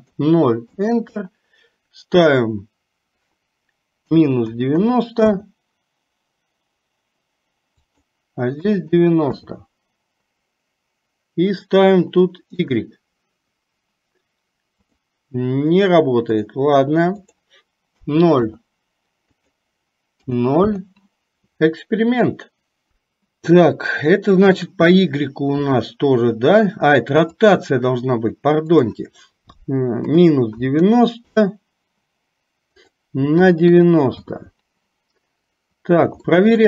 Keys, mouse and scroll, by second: 2.5-5.5 drag, 8.0-9.5 drag, 11.6-12.7 drag, 15.0-16.6 drag, 17.4-18.5 drag, 19.6-20.7 drag, 27.4 click, 28.8-31.4 drag, 32.9-34.3 drag, 36.4 shift+middle click.